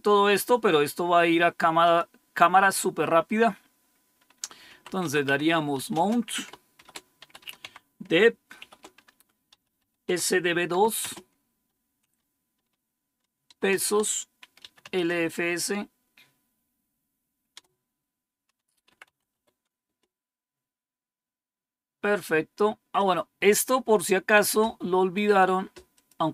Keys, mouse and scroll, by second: 1.7 click, 4.3-10.6 typing, 13.4 typing, 14.5 typing, 17.4-19.7 typing, 25.8 click.